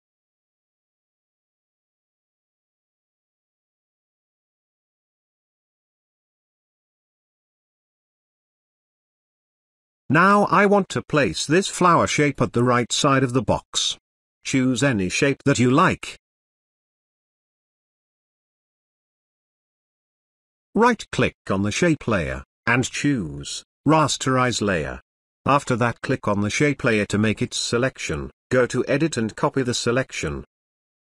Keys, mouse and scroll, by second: 5.7 click, 7.7-9.0 shift+drag, 13.3 click, 17.7 click, 18.9 ctrl+alt+z, 21.2 right click, 24.0 click, 26.7 ctrl+click, 28.5 click, 30.1 click.